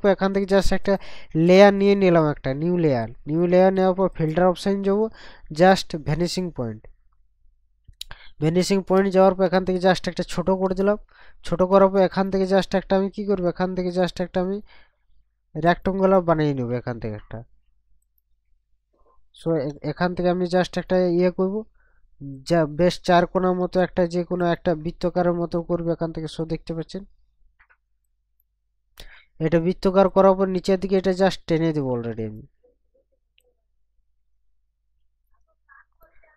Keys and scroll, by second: 9.0 ctrl+KP_Subtract, 19.4 ctrl+z.